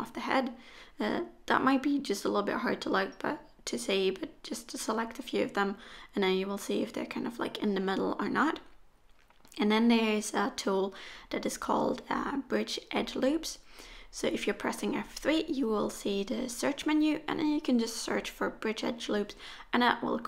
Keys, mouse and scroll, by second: 0.1 scroll up 1, 0.4 shift+middle click, 0.9 middle click, 3.3 shift+click, 3.8 shift+click, 4.3 shift+click, 4.8 shift+click, 5.1 middle click, 6.9 shift+click, 7.3 shift+click, 7.9 shift+click, 8.3 middle click, 9.9 shift+click, 10.2 middle click, 14.3 F3, 18.2-19.9 scroll down 1, 19.9-20.2 scroll down 1, 19.9 KP_1.